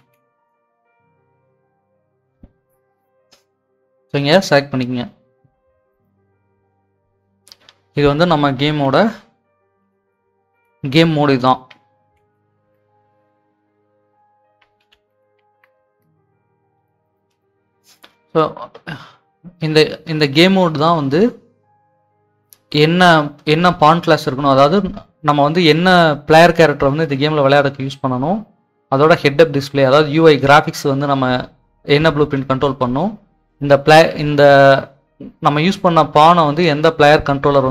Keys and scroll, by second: 5.8-6.8 typing, 8.7-10.3 typing, 11.7-13.0 typing, 14.5-16.0 typing.